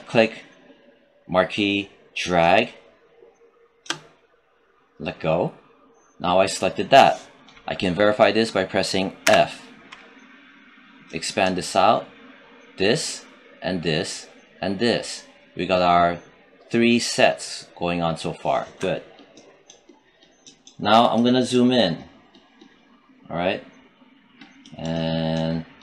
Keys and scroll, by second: 9.1 f.